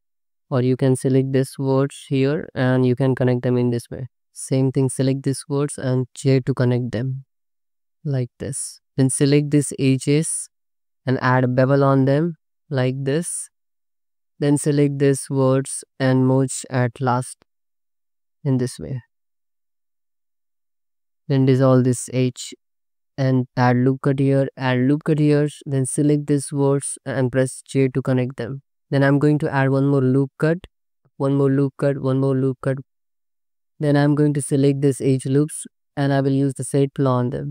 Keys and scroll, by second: 0.0 j, 2.5 j, 2.9 2, 3.7 ctrl+x, 4.4 1, 7.0 j, 7.5 2, 8.2 ctrl+x, 8.7 2, 11.7 ctrl+b, 13.5 2, 14.3 1, 17.2 m, 18.2 2, 19.4 1, 20.5 m, 20.8 2, 22.2 ctrl+x, 23.2 1, 23.8 ctrl+r, 24.6 ctrl+z, 24.7 ctrl+r, 25.0 1, 26.7 j, 28.2 j, 28.8 Tab, 28.9 ctrl+r, 31.1 ctrl+r, 33.5 2, 33.7 alt+z.